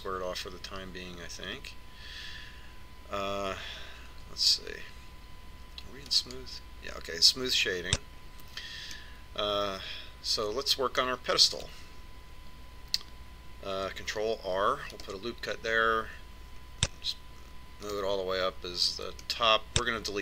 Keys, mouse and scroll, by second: 3.1-5.8 middle drag, 5.8 Tab, 7.8-9.7 drag, 10.2 Tab, 10.7-12.6 middle drag, 16.1 ctrl+r.